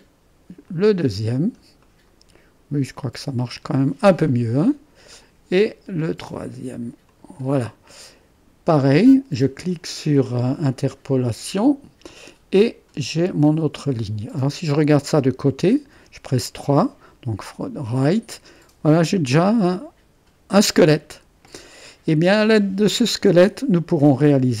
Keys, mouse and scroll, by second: 0.7 click, 1.9 middle click, 3.8 click, 4.3 middle click, 5.2-8.3 drag, 11.6-12.7 drag, 13.0-14.0 scroll down 1, 14.0 click, 14.9-15.9 drag, 15.9 3, 16.7-18.0 drag, 19.3 click, 19.9-20.6 typing, 22.2-24.6 drag.